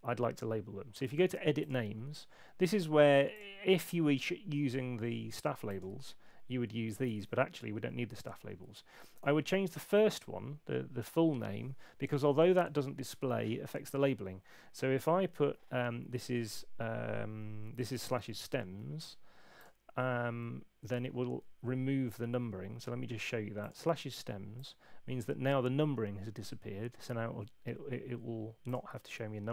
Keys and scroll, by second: 9.8 space, 17.6-18.8 typing, 20.4 Right.